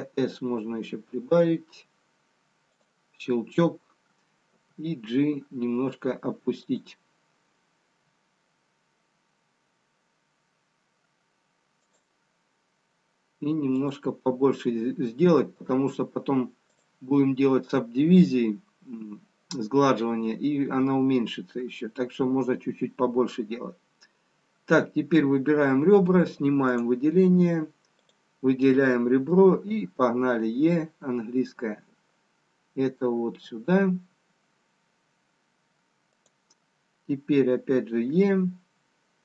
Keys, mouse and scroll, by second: 4.5 g, 8.0 g, 12.6 s, 16.9 click, 26.7 click, 28.7 click, 29.5 e, 38.4 e.